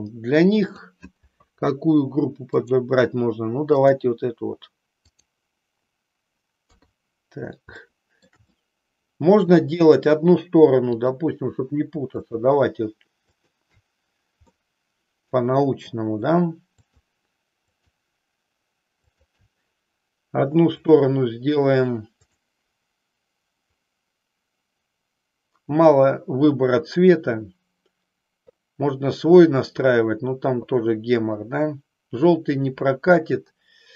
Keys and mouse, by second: 0.6 click, 2.6-3.9 drag, 5.1 click, 6.6 KP_3, 7.9 shift+middle click, 8.6-9.6 middle drag, 12.3 shift+click, 13.4 shift+click, 14.6 middle click, 16.8 shift+click, 17.9 shift+click, 19.2 shift+click, 21.0 click, 22.2-33.9 drag.